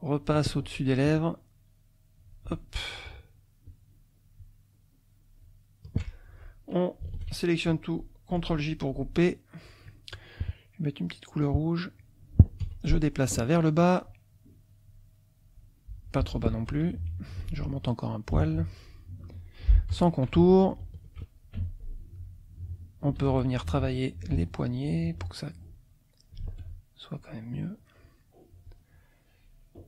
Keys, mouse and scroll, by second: 1.1-2.5 shift+drag, 3.0 shift+click, 3.6-5.6 shift+drag, 6.3 shift+F2, 7.1 ctrl+a, 8.3 shift+j, 11.4 click, 12.6 F1, 13.8-15.3 drag, 15.9 click, 16.7 F2, 18.3 click, 19.2 F2, 20.0 F1, 20.9 shift+click, 21.5 shift+F2, 22.2 click, 23.3 ctrl+a, 24.2 ctrl+click, 25.8 click, 26.4 ctrl+z, 26.6 ctrl+click, 27.2 ctrl+click, 28.6 click, 29.4-29.8 drag.